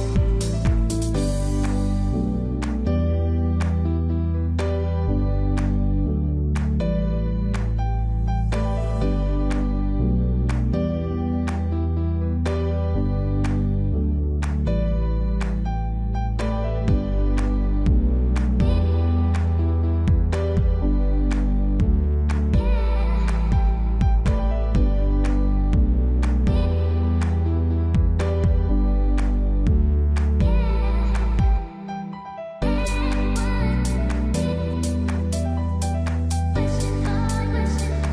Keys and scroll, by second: 33.9 ctrl+-.